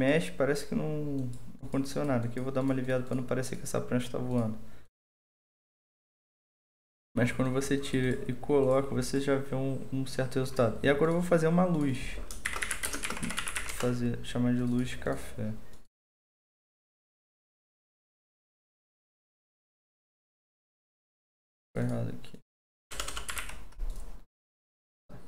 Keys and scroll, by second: 12.2-14.0 typing, 22.9-23.8 typing.